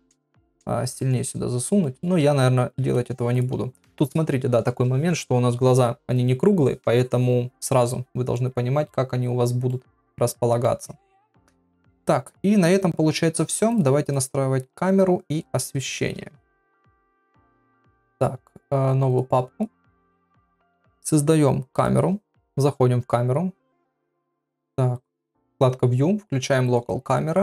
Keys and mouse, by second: 1.0 click, 1.8 middle click, 2.3 ctrl+z, 2.9 ctrl+z, 3.3 click, 8.3 middle click, 9.7 middle click, 11.4-12.5 middle drag, 16.8 KP_1, 17.4 shift+a, 19.1 click, 19.5 click, 19.9 click, 20.4 shift+a, 22.4 KP_0, 24.9 click, 26.6 click.